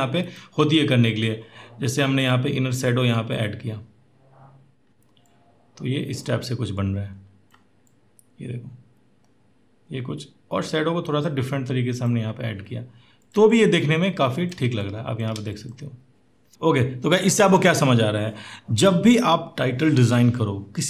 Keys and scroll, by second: 14.5 space.